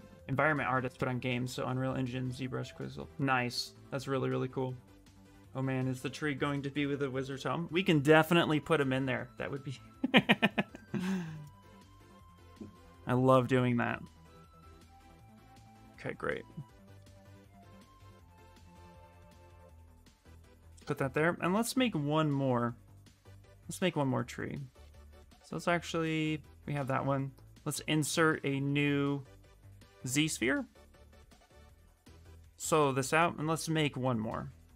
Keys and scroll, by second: 17.6 w, 33.8 w, 34.4 s.